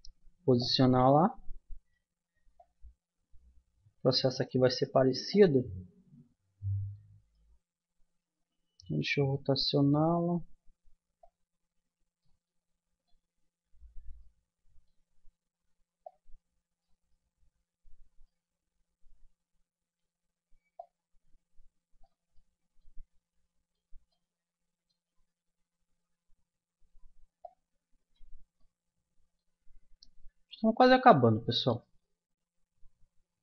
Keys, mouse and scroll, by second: 1.0-2.7 middle drag, 2.7-4.4 drag, 5.3-7.0 drag, 7.0-8.8 middle drag, 8.4 r, 11.2 click, 12.4-14.2 middle drag, 14.5-16.1 middle drag, 17.2-20.9 middle drag, 22.4 middle click, 24.2-25.2 middle drag, 25.4 Tab, 25.6 middle click, 27.4-28.6 drag, 28.6 middle click, 29.0 middle click, 30.0 KP_1, 30.6 KP_3, 31.7 KP_7.